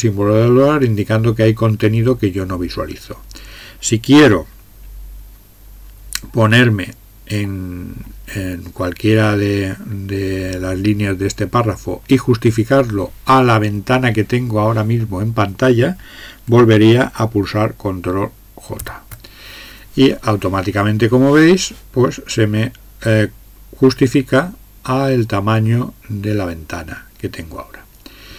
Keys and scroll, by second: 6.6 Up, 9.2 Down, 18.8 ctrl+j.